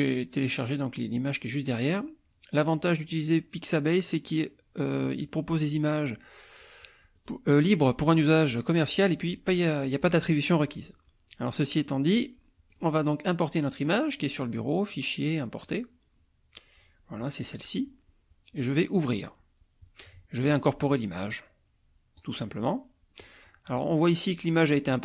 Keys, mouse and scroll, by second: 5.0-7.5 drag, 9.2-10.8 drag, 11.9 click, 12.7 click, 13.9 click, 15.7 click, 17.4 click, 18.9 click, 22.2 click.